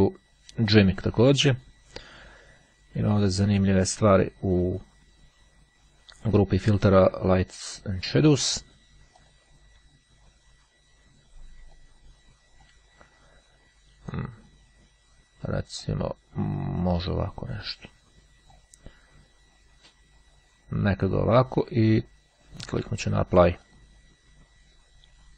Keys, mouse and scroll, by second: 0.8 click, 3.5 click, 6.7-8.2 drag, 9.3 click, 11.8-13.1 drag, 14.3 click, 15.7 click, 17.6-19.1 drag, 23.1-24.4 drag.